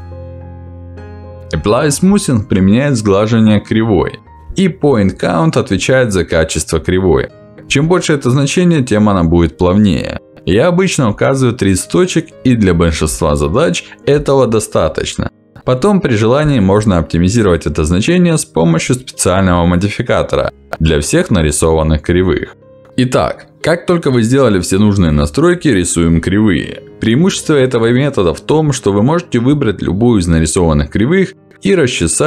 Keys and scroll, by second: 0.4 ctrl+z, 5.0 ctrl+z, 8.9 3, 10.3 Return, 14.6 ctrl+z, 16.8 2, 17.2 0, 17.6 Return, 20.5 ctrl+z, 22.1 3, 22.9 ctrl+z, 29.4 q.